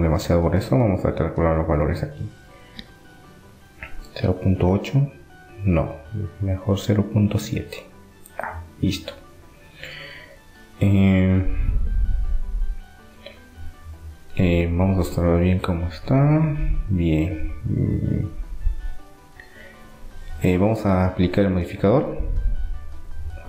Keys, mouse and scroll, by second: 0.7-2.4 drag, 5.8-7.7 drag, 10.4-12.2 middle drag, 17.4-19.2 middle drag, 18.6 Tab, 19.4 Tab, 22.4-23.4 drag, 23.1 Tab.